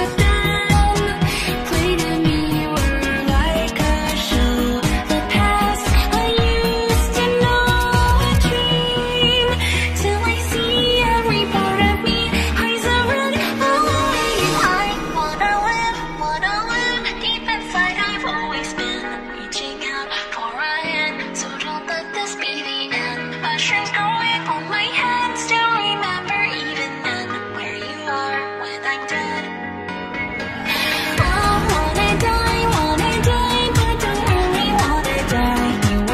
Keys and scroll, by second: 10.4 s, 23.4 p, 31.9 p.